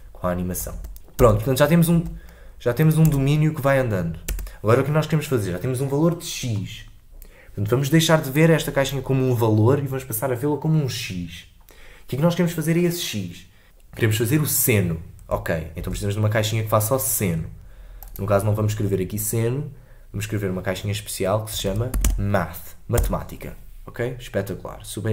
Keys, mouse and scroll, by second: 0.7 space, 0.9 shift+Left, 1.1 space, 1.9 space, 3.0 space, 4.3 space.